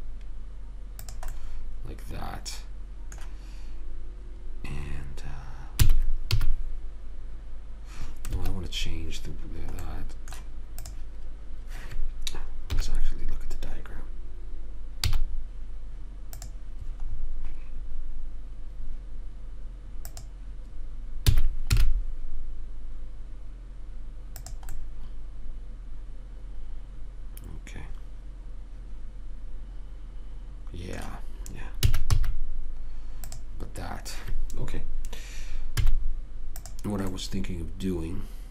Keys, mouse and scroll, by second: 2.3-3.6 middle drag, 6.1 s, 10.2 middle click, 11.1 click, 13.0 KP_3, 15.4 z, 20.4-21.6 drag, 21.6 s, 25.1-27.0 middle drag, 32.1 s, 36.1 z, 37.4-38.5 middle drag.